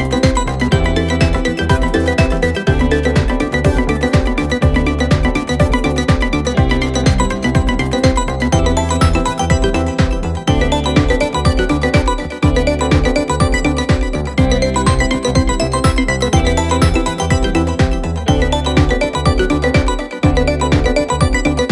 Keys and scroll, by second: 5.5 ctrl+d, 5.6 Escape, 7.0 4, 19.4 2.